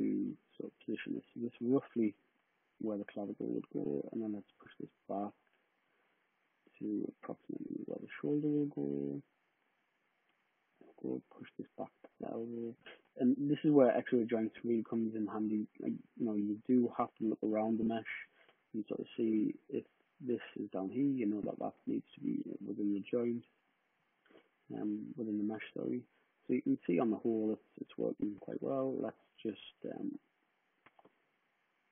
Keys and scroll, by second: 21.4 super+z.